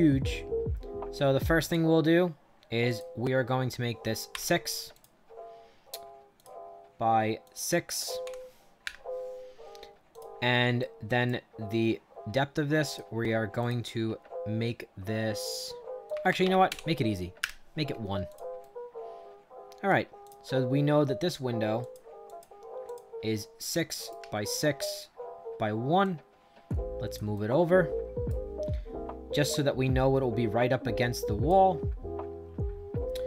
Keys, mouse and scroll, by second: 0.4 middle click, 1.5 click, 2.8 click, 4.2 6, 4.8 click, 6.3 click, 7.3 click, 8.1 6, 8.7 Return, 10.0 click, 10.7 right click, 12.8 click, 13.5 click, 16.0 click, 16.6 1, 17.3 Return, 18.2 click, 18.5-19.8 right drag, 20.1 click, 21.7 click, 22.2 click, 22.8 click, 23.6 right click, 24.3-25.5 shift+middle drag, 25.9-27.1 drag, 27.2 right click, 29.5-31.4 drag.